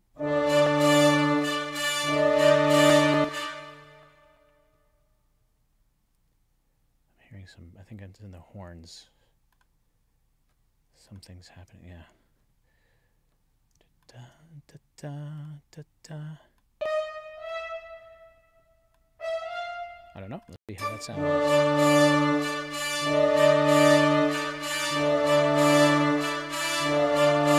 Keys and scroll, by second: 3.0 space, 20.5 space.